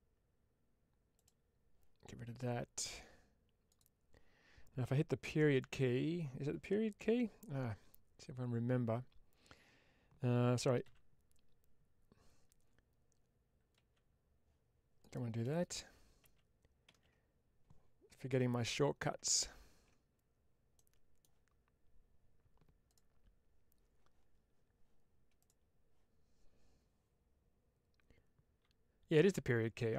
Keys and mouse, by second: 1.0 click, 3.6-5.5 drag, 10.8 x, 14.9 click, 15.6 ctrl+z, 17.4 ctrl+z, 17.5 ctrl+z, 20.6 middle click, 22.7 click.